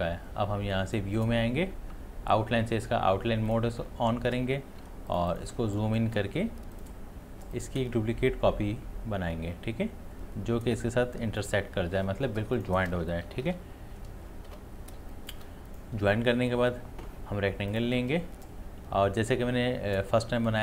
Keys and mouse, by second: 0.7 click, 3.5 click, 4.8 space, 5.1 ctrl+click, 12.4 space, 12.6 ctrl+alt+click, 13.3 ctrl+y, 15.0 space, 15.1 click, 16.0 space, 16.1 click, 16.5 space, 17.7 click.